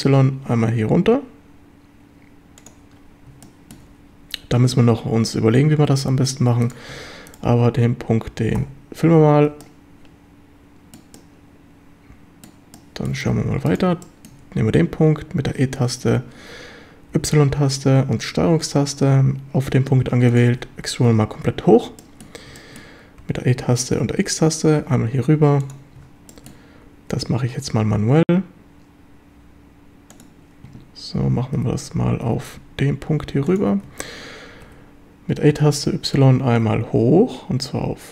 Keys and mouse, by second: 2.6 click, 3.5 shift+click, 9.1 a, 9.7-11.0 shift+drag, 11.2-12.5 shift+drag, 12.8 shift+click, 14.1 shift+middle click, 14.2 shift+click, 15.5 e, 17.2 y, 20.3 ctrl+click, 22.0 shift+click, 22.6 shift+drag, 23.2 e, 24.0 x, 25.7 click, 26.3 shift+click, 26.9 e, 30.1 click, 31.6 g, 32.2 x, 33.5 ctrl+click, 34.6 e, 35.6 y.